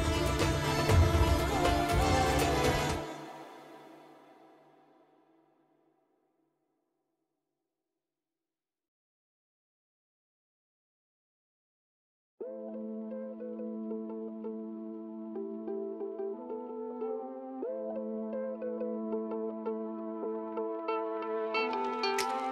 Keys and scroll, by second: 0.3 space, 2.2 [, 2.5 ], 3.7 [, 8.0 space, 8.5 space, 14.8 5, 17.4 ], 19.2 ctrl+alt+z, 21.9 [.